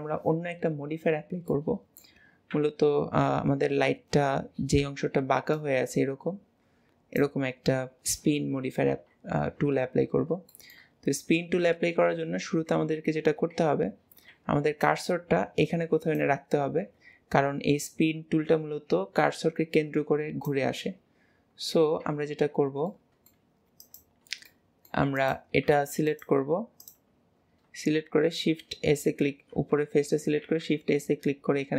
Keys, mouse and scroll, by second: 0.2 KP_1, 1.6-2.6 middle drag, 2.6 KP_1, 10.2 scroll up 2, 10.6-23.9 shift+middle drag, 23.9 click, 24.6-25.2 middle drag, 25.2 click, 26.2 click, 26.9 click, 28.0 shift+s, 29.4 shift+s.